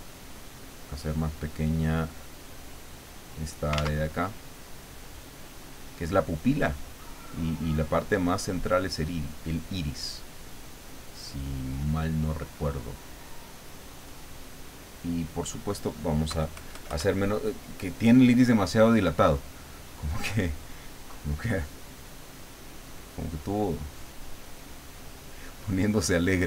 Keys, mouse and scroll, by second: 3.8 ctrl+z, 4.2-8.8 ctrl+drag, 9.2-11.1 drag, 11.3-14.5 drag, 16.3 KP_Add, 17.1 middle click, 22.1 click, 23.3 click, 25.0 click.